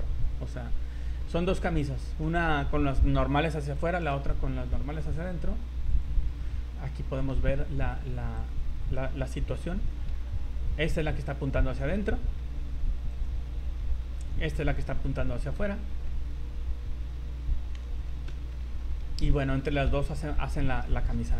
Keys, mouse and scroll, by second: 0.7 scroll down 3, 1.2 middle click, 1.9 scroll down 2, 2.2 shift+middle click, 4.3 scroll up 2, 5.9 click, 6.5 z, 6.8 middle click, 7.4 z, 8.4 right click, 9.5 h, 9.8 middle click, 12.4 ctrl+z, 13.1 right click, 14.2 h, 14.5 middle click, 15.7 scroll up 3, 16.1 middle click, 16.6 scroll up 1, 18.6 alt+h, 18.8-19.1 alt+scroll down 4, 19.3 middle click, 19.9 a, 20.8 middle click.